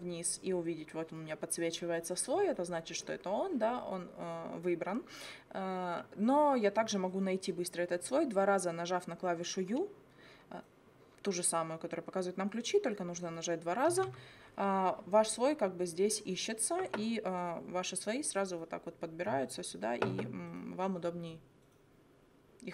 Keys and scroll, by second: 13.9 u.